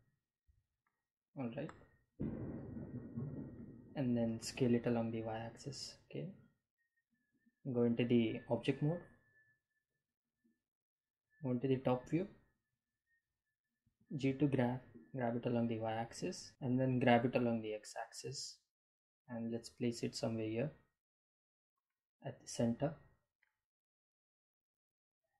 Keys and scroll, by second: 4.8 s, 5.2 y, 11.5 Home, 13.8 g, 14.5 y, 16.5 x.